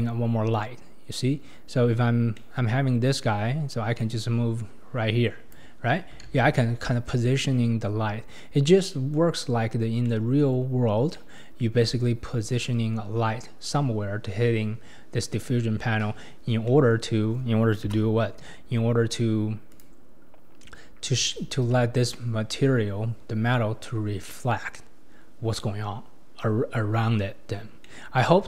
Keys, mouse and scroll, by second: 1.7-2.4 scroll up 4, 2.4-2.7 middle drag, 2.7-4.0 scroll up 4, 4.0-6.3 drag, 6.3 ctrl+z, 8.7 scroll down 1, 8.8-9.3 middle drag, 9.3-10.0 scroll up 2, 10.0-14.6 middle drag, 16.5 scroll down 1, 16.7-17.9 middle drag, 17.9 KP_0, 19.0-19.6 scroll up 1, 19.8 click, 20.8-21.3 scroll up 4, 21.3-21.9 shift+middle drag, 21.9 scroll up 1, 27.3-27.8 scroll down 3, 27.8-28.3 middle drag, 28.3-28.4 scroll down 2.